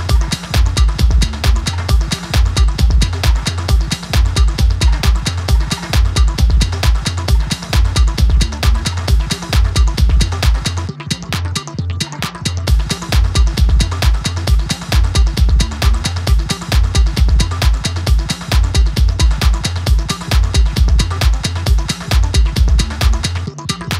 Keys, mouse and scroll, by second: 0.2-5.5 drag, 7.4 click, 8.7 right click, 9.1 click, 9.4 scroll down 1, 9.7 click, 10.3-12.3 drag, 12.7 click, 13.2 scroll up 1, 13.5 ctrl+r, 15.3 click, 15.7 click, 17.0 right click, 17.0 click, 17.3 scroll up 2, 17.6 middle click, 18.2 scroll up 4, 18.4 scroll down 1, 18.5 middle click, 18.8 click, 19.1-19.5 scroll down 1, 19.5 middle click, 19.7 click, 20.2 h, 20.6 ctrl+z, 20.7 click, 20.9 scroll down 3, 22.0 click, 22.7-23.1 scroll up 5, 23.1-23.9 middle drag.